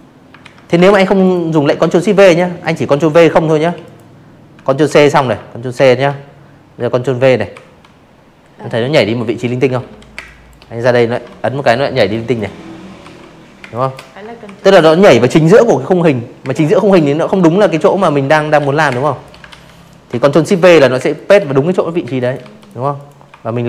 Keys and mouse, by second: 0.6 Delete, 0.7 click, 1.8 ctrl+c, 2.7 ctrl+c, 4.5 ctrl+v, 6.7 ctrl+z, 7.1 space, 7.2 click, 8.1 ctrl+v, 8.9 space, 9.1 click, 9.9 ctrl+v, 10.5 space, 10.6 click, 11.4 ctrl+v, 13.4 space, 13.5 click, 14.8 ctrl+z, 15.5 ctrl+z, 15.8 space, 15.9 click, 16.4 ctrl+z, 17.4 ctrl+shift+v, 17.9 space, 18.1 click, 18.4 v, 18.9 space, 19.1 click, 19.4 v, 19.5 click, 19.9 click, 20.6 shift+click, 21.7 click, 22.4 ctrl+z, 22.9 space, 23.1 click, 23.2 v, 23.4 click.